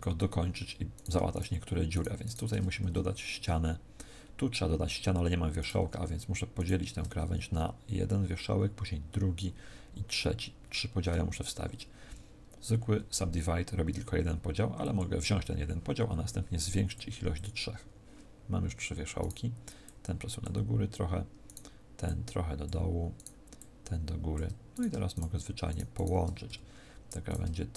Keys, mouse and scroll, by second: 0.9 right click, 1.2 shift+right click, 1.8 shift+right click, 2.5 f, 2.7 z, 5.5 right click, 6.5 shift+right click, 12.0 w, 16.7 click, 17.2 click, 19.1 right click, 19.7 click, 21.3 right click, 21.9 click, 23.1 right click, 23.5 click, 24.6 right click, 25.0 shift+right click, 26.4 f, 27.1 right click, 27.6 shift+right click.